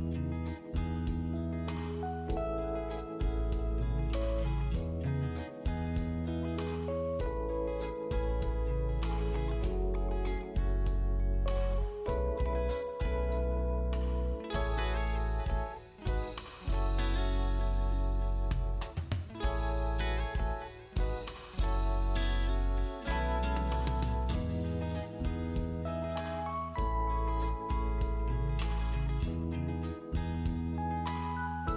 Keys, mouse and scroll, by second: 2.5 click, 8.9 shift+click, 11.6 shift+click, 12.9 click, 17.7 click, 19.2-19.6 scroll up 1, 20.2 click, 21.9 click, 24.3-24.7 scroll down 1, 24.7 click, 25.2-25.7 scroll up 1, 25.7 click, 27.8-28.6 scroll down 1, 28.6 click, 29.6-30.1 scroll up 1, 30.1 click.